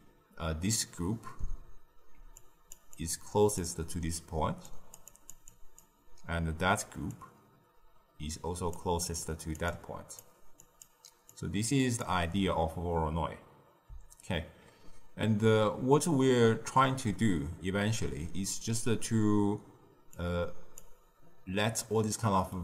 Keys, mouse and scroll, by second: 2.3-8.7 drag, 8.7 d, 9.1-20.7 drag, 20.7 z, 22.5-22.6 middle drag.